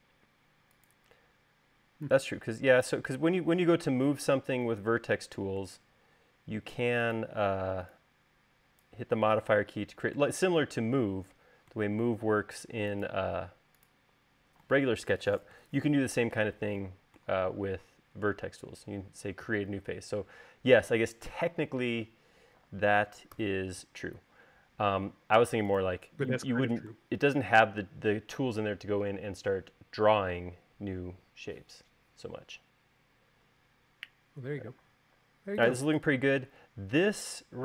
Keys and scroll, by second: 24.2 u, 36.5 u.